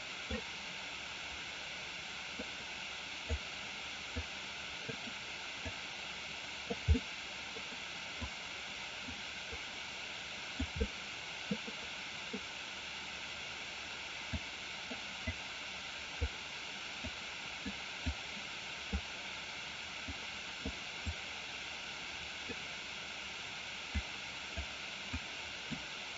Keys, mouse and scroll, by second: 2.5 click, 4.3 click, 5.7-6.9 drag, 7.0 middle click, 8.4 click, 9.5-10.6 drag, 10.9-12.2 middle drag, 14.5 click, 15.3 click, 17.3 click, 18.2 click, 20.1 click, 21.0-22.6 drag, 24.1 click, 25.3 click.